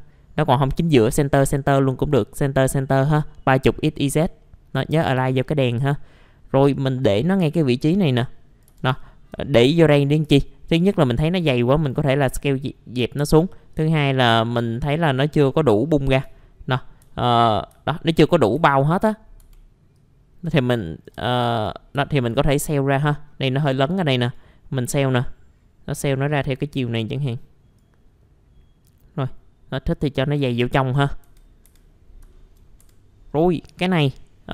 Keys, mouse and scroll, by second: 4.4 middle click, 4.7 scroll up 1, 4.7-5.7 typing, 5.4 middle click, 5.6-5.9 scroll down 1, 6.7 click, 7.8 s, 8.7 s, 8.9 alt+middle click, 9.8-10.2 scroll up 1, 11.0-16.2 drag, 16.2 scroll down 1, 16.4 alt+middle click, 17.8 alt+middle click, 18.5 F4, 19.0-19.4 scroll up 1, 19.4 typing, 19.9 click, 21.3 alt+middle click, 22.4-24.2 scroll up 1, 24.2-30.8 drag, 31.1 middle click, 31.2-31.6 scroll down 1, 31.6 F4, 31.9-32.2 scroll down 1, 32.3 alt+middle click, 32.8 F4, 33.4 middle click.